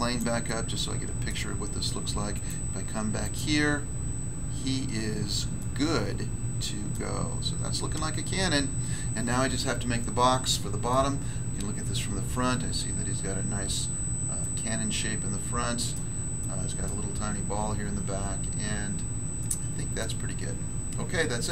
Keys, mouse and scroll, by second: 0.1 click, 0.4 middle click, 1.2 middle click, 2.3 click, 2.4 click, 3.1 click, 3.3 click, 4.7 scroll up 1, 5.5 middle click, 6.9 middle click, 7.2 scroll up 1, 10.8 middle click, 12.2 middle click, 12.6-13.8 scroll up 1, 13.8-14.4 scroll up 1, 14.4 middle click, 15.9 middle click, 16.4 middle click, 18.9 scroll down 1, 19.4 middle click, 20.0 middle click.